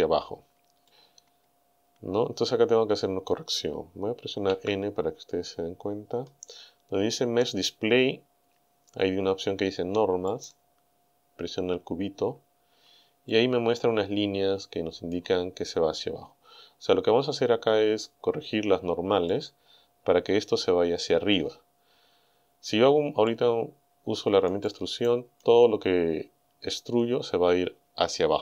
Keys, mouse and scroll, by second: 0.9-3.5 middle drag, 4.5 n, 5.4-5.7 scroll down 2, 6.0 scroll down 2, 10.3 click, 13.3-15.3 middle drag, 17.4-18.1 scroll down 2, 18.1-19.5 middle drag, 23.3-24.7 middle drag, 24.7 click, 26.1-26.4 scroll up 1, 26.6-26.9 scroll down 2.